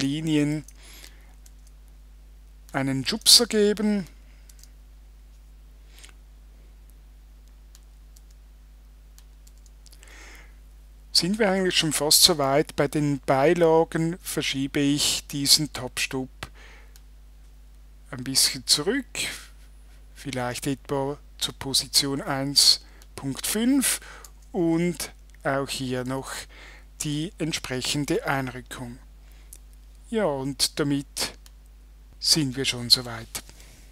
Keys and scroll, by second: 0.5 Tab, 3.1 Tab, 4.5 Tab, 8.2 Tab, 9.5 Tab, 24.3 Tab, 26.1 Tab.